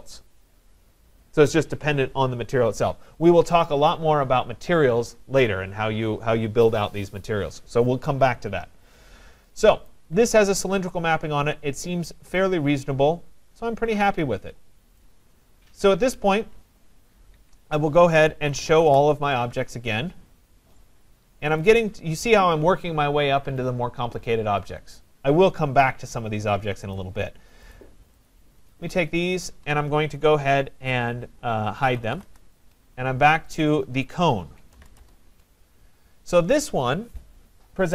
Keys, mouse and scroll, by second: 9.0 middle click, 9.1 middle click, 9.1 middle click, 9.9 right click, 10.2 middle click, 10.3 middle click, 10.4 middle click, 10.5 middle click, 10.6 middle click, 11.1 middle click, 11.2 middle click, 11.6 middle click, 11.8 middle click, 13.5 scroll, 15.0 right click, 15.7 scroll down 4, 17.4 Escape, 18.2-19.2 typing, 19.8 middle click, 20.0 middle click, 21.6 click, 26.9 click, 27.7 shift+click, 28.3 shift+click, 28.7 shift+click, 29.4 shift+click, 32.2 Return, 32.6 typing, 35.0 Return, 35.4-36.2 typing, 35.7 click, 37.2-37.9 typing.